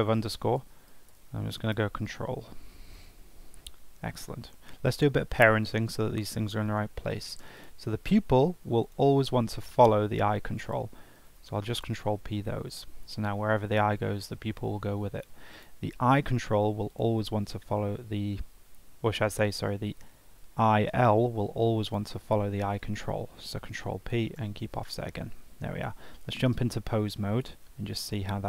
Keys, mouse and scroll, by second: 7.5 click, 8.8 shift+click, 11.1 ctrl+p, 15.5 click, 16.9 shift+click, 19.4 click, 21.8 shift+click, 23.4 ctrl+p, 28.0 ctrl+Tab.